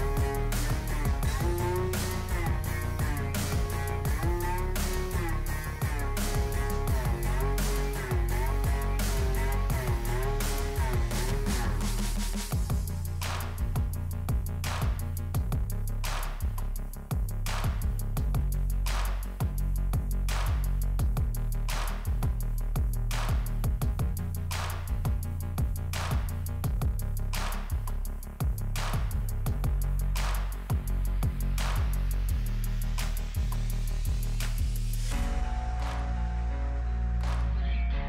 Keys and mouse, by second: 1.4 right click, 7.0 right click, 14.1 right click, 25.7 right click, 36.0 right click, 36.1 right click.